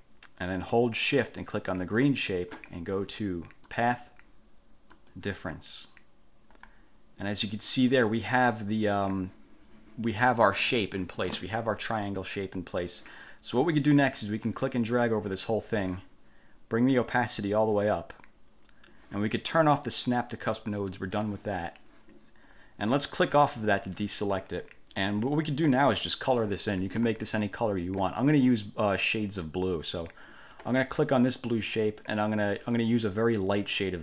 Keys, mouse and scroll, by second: 2.0 shift+click, 3.9 click, 5.1 click, 14.4-15.9 drag, 17.1-18.4 drag, 21.2 click, 23.7 click, 28.2-30.9 drag, 31.6 click, 33.9 click.